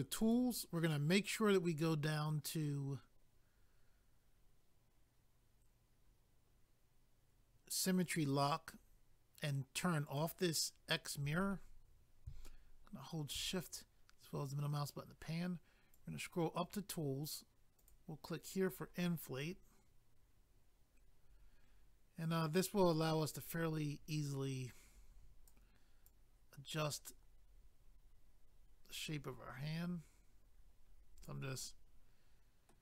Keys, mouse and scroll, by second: 0.2 click, 0.3 click, 6.0-6.5 scroll down 1, 6.5 scroll down 1, 8.0 click, 8.1 click, 8.8-9.3 scroll down 1, 10.9 middle click, 12.4 shift+middle click, 15.9 click, 17.8 click, 17.9 click, 18.6 click, 18.7 click, 19.4 click, 21.4 click, 26.1 click, 31.6 middle click.